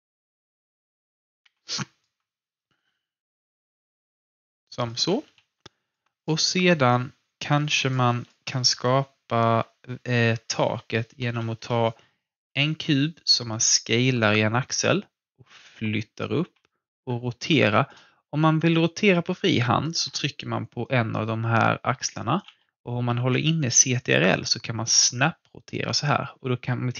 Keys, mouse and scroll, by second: 0.1 click, 1.4 w, 1.6-3.6 alt+drag, 3.6 alt+click, 5.2 f, 5.6 alt+click, 10.7-11.1 scroll down 1, 11.1 ctrl+d, 12.4 r, 13.1-14.8 drag, 14.8 w, 15.5 click, 16.5 e, 17.7 alt+click, 19.9 ctrl+z, 20.5 alt+click, 23.9-26.9 ctrl+drag.